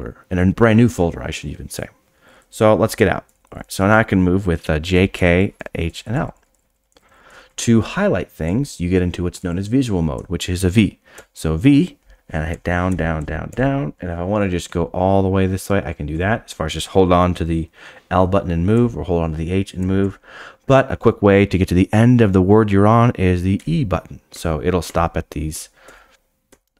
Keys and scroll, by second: 11.1 v, 23.5-26.7 typing.